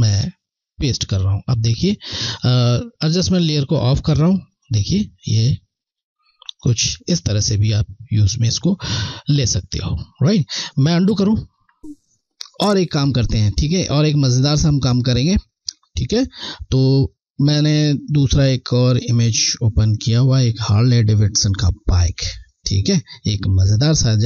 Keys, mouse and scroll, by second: 7.5 alt+scroll down 1, 10.6 alt+scroll down 1, 13.5 click, 14.9 scroll, 16.9-17.3 alt+scroll down 1, 18.0 click, 23.2 click, 23.5 scroll.